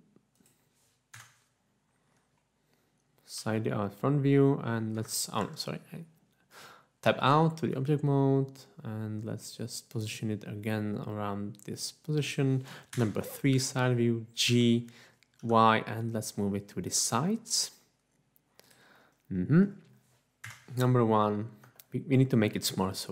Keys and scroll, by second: 1.1 1, 3.4 g, 5.0 Escape, 5.4 Tab, 7.2 g, 13.2 3, 14.5 g, 15.5 y, 20.6 1, 22.5 1.